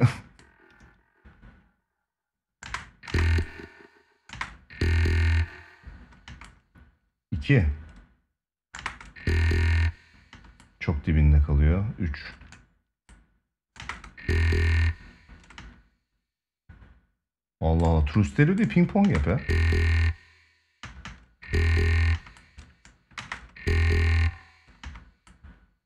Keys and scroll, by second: 2.4 space, 4.0 space, 6.0 space, 8.5 space, 10.1 space, 13.5 space, 15.3 space, 18.7 space, 20.5 space, 24.5 space.